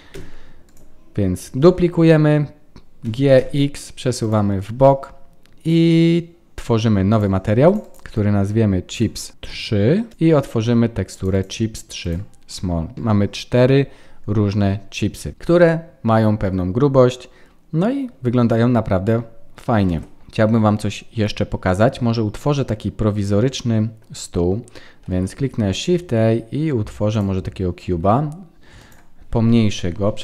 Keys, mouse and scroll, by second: 0.6 click, 1.6 shift+d, 7.0 click, 7.8 click, 10.1 click, 12.0 click, 15.3 middle click, 15.3 scroll down 4, 18.9-19.6 scroll up 1, 19.8 ctrl+s, 19.8 scroll up 1, 20.3-21.9 scroll down 4, 22.3 middle click, 25.0 shift+a, 29.7 KP_1.